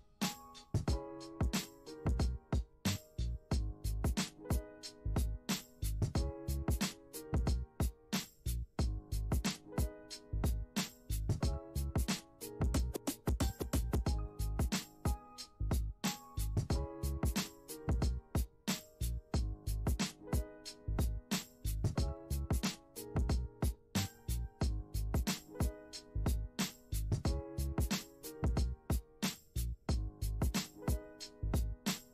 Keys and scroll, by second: 3.5 space, 8.5 space, 18.3 space.